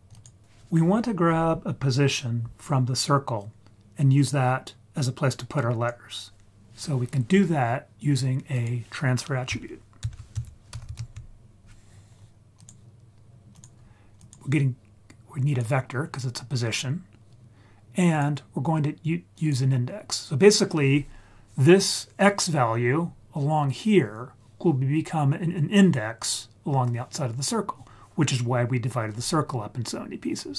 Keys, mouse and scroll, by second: 0.1 click, 8.0-8.5 scroll up 3, 8.5 click, 10.0 shift+a, 14.1-15.6 drag, 15.9-16.7 scroll up 2, 16.7 scroll down 1, 16.9-17.2 scroll down 1, 18.0-19.4 drag, 19.9-20.9 scroll down 5, 29.4-30.4 scroll down 1, 30.4 scroll down 2.